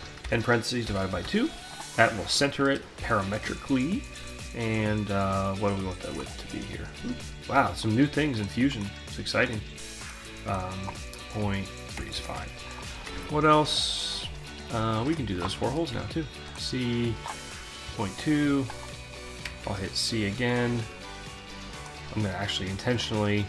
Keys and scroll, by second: 0.2-1.5 typing, 11.6 Return, 13.1 alt+Tab, 15.4 c, 17.9 Return, 22.6 c.